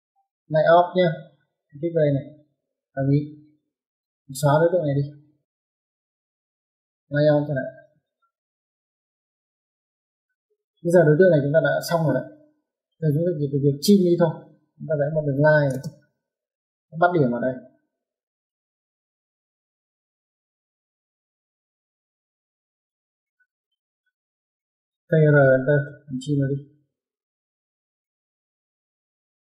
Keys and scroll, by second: 4.1 Escape, 5.8 e, 6.0 space, 7.0-7.6 typing, 10.1 Escape, 10.3 Escape, 15.1-15.5 typing, 20.4 Escape, 23.4 Escape, 24.8-25.5 typing.